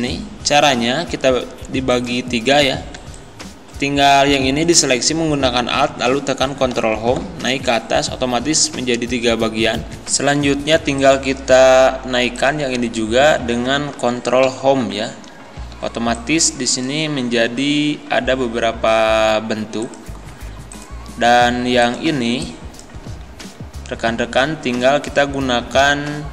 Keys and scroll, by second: 6.7 ctrl+Home, 10.1 space, 14.5 ctrl+Home, 15.6 z, 23.1 ctrl+z.